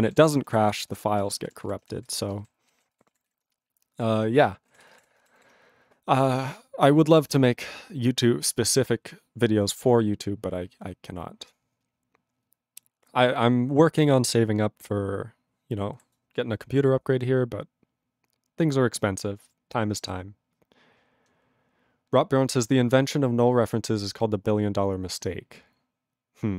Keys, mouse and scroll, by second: 0.0 ctrl+alt+b, 0.3 ctrl+g, 0.7 ctrl+s, 0.8 ctrl+space, 1.3 ctrl+alt+f, 1.4 ctrl+alt+f, 1.7 ctrl+g, 2.0 ctrl+s, 2.1 ctrl+space, 2.6 ctrl+alt+b, 2.7 ctrl+alt+b, 3.0 ctrl+g, 3.4 ctrl+s, 4.7 ctrl+a, 4.9 ctrl+space, 4.9 ctrl+e, 5.0 ctrl+g, 5.4 ctrl+s.